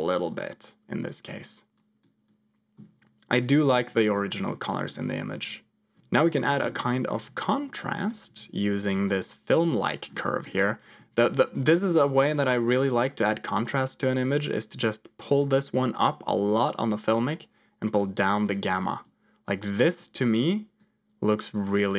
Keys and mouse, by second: 1.0 click, 1.1 click, 1.7 click, 2.2-3.6 drag, 3.8 click, 4.3 middle click, 4.9 click, 5.9 click, 6.0 shift+a, 8.9 click, 10.2 middle click, 14.1-15.4 drag, 17.1 click, 19.1 click, 20.0 click, 21.8-21.9 drag.